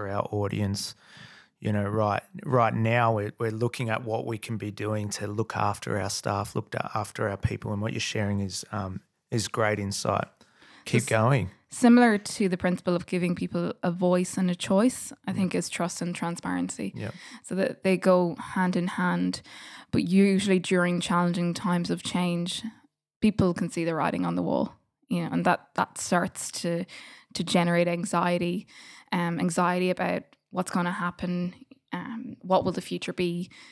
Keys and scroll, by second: 16.7 f, 17.0 f, 19.0 g, 21.1 super+z, 23.1 g, 25.4 d, 27.6 BackSpace, 29.6 Delete, 32.4 Delete, 33.3 F8.